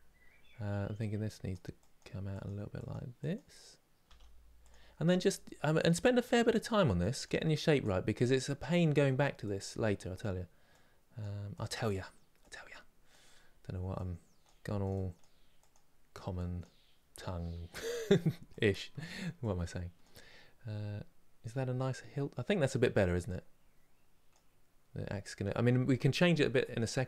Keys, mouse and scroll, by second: 3.7 f, 4.8-21.8 drag, 21.8-22.9 scroll down 1, 22.9-25.9 drag, 26.3-27.0 drag.